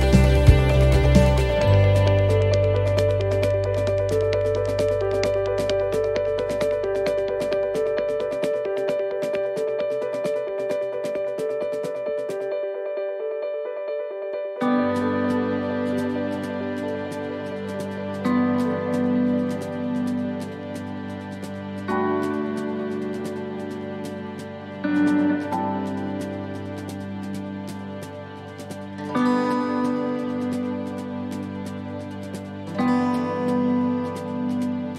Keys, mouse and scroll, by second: 0.5 click, 1.5 middle click, 2.3 shift+middle click, 2.8 middle click, 3.4-4.1 scroll up 3, 3.8 middle click, 5.1 shift+middle click, 5.7 middle click, 6.1-7.0 scroll down 2, 6.5 middle click, 7.0-7.5 scroll up 2, 7.3 middle click, 7.9 middle click, 8.4-8.8 scroll down 2, 8.7 middle click, 10.3 shift+middle click, 10.8 scroll up 2, 11.0 middle click, 11.9 scroll down 1, 13.2 middle click, 15.9 click, 19.7 middle click, 21.2-21.5 scroll down 2, 21.5 middle click, 21.9-22.5 scroll up 3, 22.3 middle click, 23.2 a, 23.7 middle click, 24.0-24.6 scroll down 1, 24.6-25.3 scroll down 1, 25.8 click, 28.9 click.